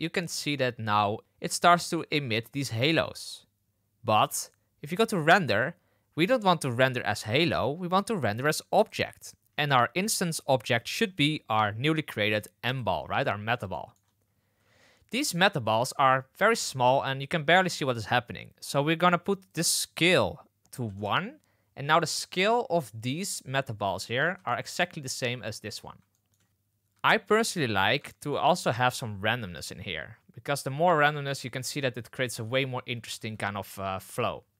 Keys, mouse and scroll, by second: 1.8 space, 2.7 space, 5.1 click, 7.3-8.8 middle drag, 10.7-12.7 middle drag, 13.7 shift+middle drag, 14.6 space, 16.3 space, 16.7 space, 17.4 space, 19.5-21.6 drag, 24.4 shift+middle drag, 26.1 shift+middle drag, 27.2 shift+middle drag, 28.0 shift+middle drag, 29.6-31.8 middle drag, 33.1 space.